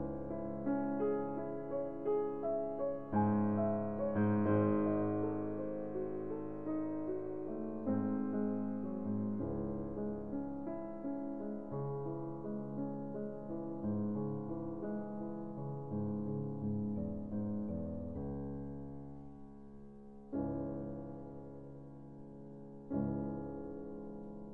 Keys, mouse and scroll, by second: 0.4 ctrl+z, 1.6 ctrl+z, 3.7 ctrl+z, 4.8 ctrl+z, 5.3 ctrl+z, 5.9 ctrl+z, 6.5 ctrl+z, 7.0 ctrl+z, 7.3 ctrl+z, 7.4 ctrl+z, 7.5 ctrl+z, 7.9 ctrl+z, 8.2 ctrl+z, 8.8 ctrl+z, 10.1 ctrl+z, 10.7 ctrl+z, 11.1 ctrl+z, 12.1 ctrl+z, 14.0 a, 14.9 Tab, 20.3-22.1 ctrl+alt+shift+drag, 22.4-24.3 drag.